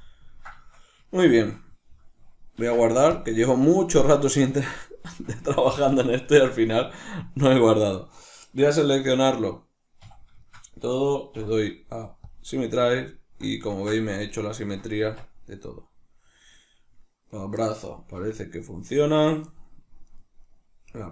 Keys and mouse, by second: 2.5 ctrl+s, 5.7 shift+middle click, 6.8 shift+middle click, 7.7 right click, 9.9 a, 10.4-17.2 shift+middle drag, 11.2 w, 14.9 Tab, 17.2 right click, 18.0-19.2 middle drag, 18.0 g, 19.2 right click, 20.0 right click, 20.8 g.